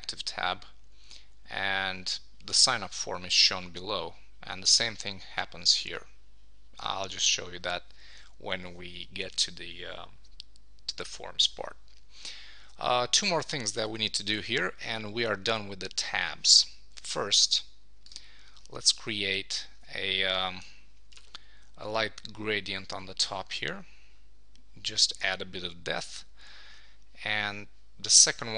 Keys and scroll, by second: 12.7 super+s.